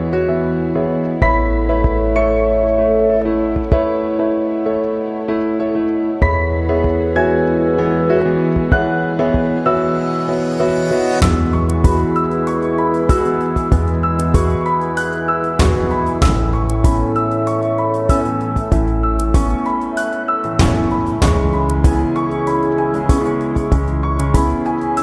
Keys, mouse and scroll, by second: 0.1 click, 0.6 space, 0.7 click, 0.8 space, 1.7 click, 2.7 space, 2.9 click, 2.9 space, 3.3 click, 5.1 space, 5.2 click, 5.4 space, 6.4 click, 6.8 space, 7.0 click, 7.0 space, 8.0-9.7 drag, 9.9 space, 9.9 click, 10.1 space, 10.9 click, 12.0 space, 15.1 space, 15.2 alt+click, 16.2 ctrl+z, 17.2-19.0 alt+drag, 19.0 click, 19.5 space, 20.6 click, 23.3 space, 23.3 click, 23.5 space, 24.6 click, 24.8 space.